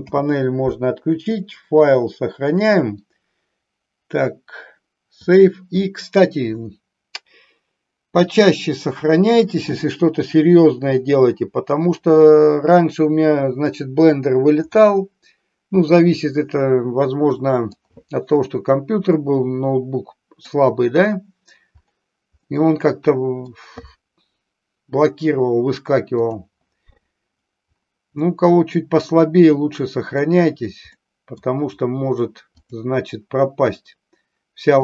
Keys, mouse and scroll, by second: 0.1 n, 2.6-5.5 drag, 12.9 middle click, 14.8-17.9 middle drag, 19.2-20.4 middle drag, 22.6-23.6 middle drag, 26.2 click, 28.3-30.2 middle drag, 31.1-31.4 middle drag, 32.6 click.